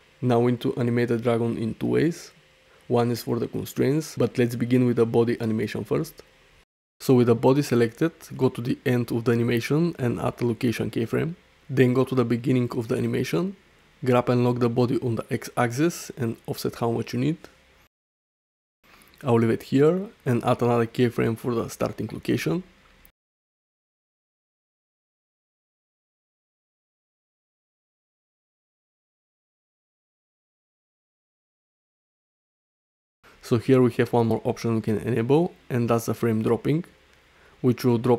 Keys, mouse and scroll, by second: 0.5-0.8 alt+middle drag, 1.0-1.4 ctrl+alt+shift+middle drag, 1.5-1.8 alt+middle drag, 2.0 ctrl+alt+middle click, 4.2-4.7 drag, 9.9 i, 12.3 shift+Left, 13.0 ctrl+alt+drag, 13.9 g, 15.0 x, 20.1 i, 22.3 space, 25.3 space, 26.4 ctrl+alt+middle drag, 26.8 alt+shift+middle drag, 27.0 alt+middle click, 29.2 space, 30.5 middle click, 31.5 shift+middle click, 31.9 middle click, 33.2 space, 35.0-38.1 drag.